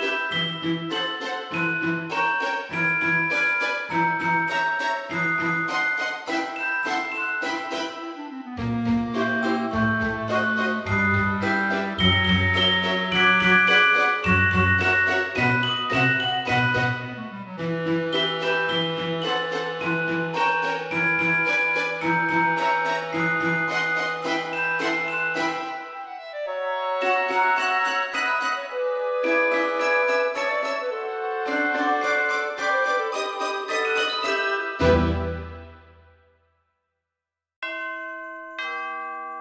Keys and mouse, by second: 0.2 KP_3, 0.4 Return, 0.4 KP_Enter, 3.0 shift+a, 4.2 shift+a, 6.9 Tab, 7.5 middle click, 8.3 shift+middle click, 9.3 ctrl+r, 11.4 click, 11.9 right click, 12.4 s, 12.6 x, 14.4 click, 14.6 middle click, 15.8 click, 16.0 right click, 16.6 s, 16.9 y, 18.6 click, 19.0 shift+middle click, 20.5 click, 21.8 alt+shift+click, 24.5 shift+d, 26.8 right click, 27.6 p, 27.9 click, 28.5 Tab, 28.8 click, 31.0 Tab, 31.5 a, 32.1 middle click, 32.9 alt+e, 33.3 click, 35.9 click, 36.2 Tab.